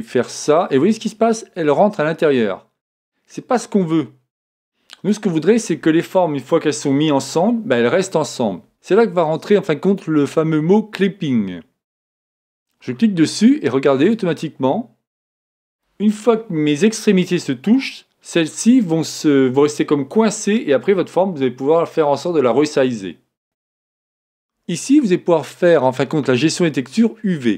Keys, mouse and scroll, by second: 11.9-13.9 drag, 14.1-15.9 drag.